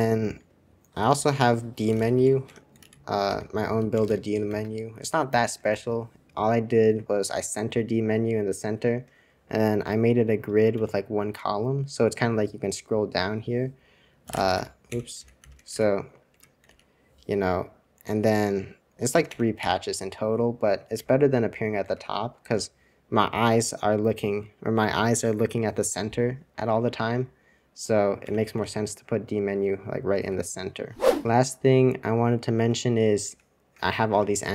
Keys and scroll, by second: 2.8 super+c, 2.8-6.0 typing, 3.2 super+r, 9.8-11.5 Down, 11.5-12.1 Up, 14.0-16.2 typing, 16.2 Escape, 16.6 super+r, 19.2 Escape, 19.6 super+2, 21.1 super+2, 21.1 super+1, 21.1 typing, 21.8 super+2, 28.3 Escape, 28.6 super+r, 29.5 Escape, 30.1 super+f, 33.3 super+1, 34.1 super+Return.